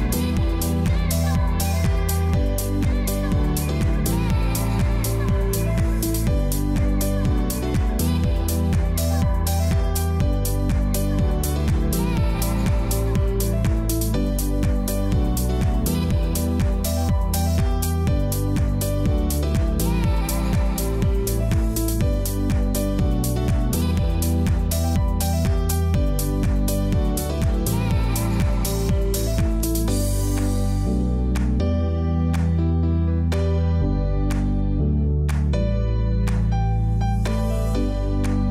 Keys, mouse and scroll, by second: 0.0-2.6 typing, 0.6 click, 4.8 typing, 4.9 click, 6.5-9.7 typing, 7.4 click, 8.5 click, 12.8 click, 13.6 ], 14.2 click, 18.6 z, 19.0 click, 23.6 ctrl+shift+click, 24.3 ctrl+e, 24.9 click, 26.6 z, 27.0 click, 27.5 space, 27.7 click, 28.1 space, 28.4 click, 29.8-31.3 typing, 30.8 click, 31.4 click, 32.8-34.9 typing, 33.2 click, 35.9 click, 36.8 typing, 37.3 click, 38.2 [.